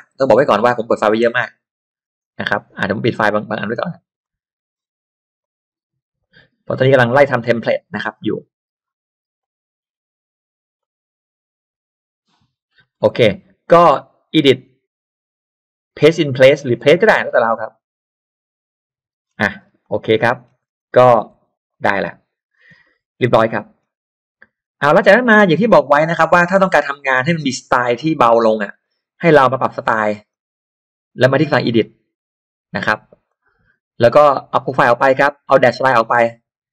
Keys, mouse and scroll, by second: 4.2 click, 5.4 click, 6.1 click, 9.4 click, 10.8 click, 12.7 middle click, 12.9-13.4 scroll down 2, 13.0 middle click, 14.3 click, 17.5 click, 19.2-19.9 scroll down 2, 19.8 click, 20.2 middle click, 20.6-21.3 scroll up 2, 21.4 e, 21.6 click, 22.5-23.2 scroll down 2, 22.7 space, 23.4 middle click, 24.1-24.7 scroll up 2, 24.8-25.8 scroll down 4, 27.0-27.6 scroll up 1, 27.8 click, 28.8 click, 29.6 click, 30.3 click, 33.2 click, 34.9 click, 36.0 click.